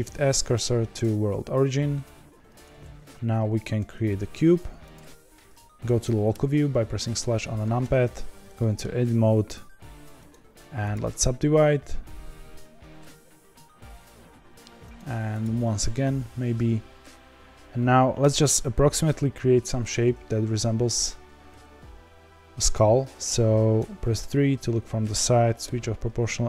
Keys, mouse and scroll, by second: 0.9 shift+s, 4.9 shift+a, 6.3 KP_Divide, 7.1-7.8 scroll down 5, 7.8 Tab, 8.5-10.9 middle drag, 10.9-20.0 right drag, 20.0 2, 21.0 1, 23.8 KP_3, 25.6 o.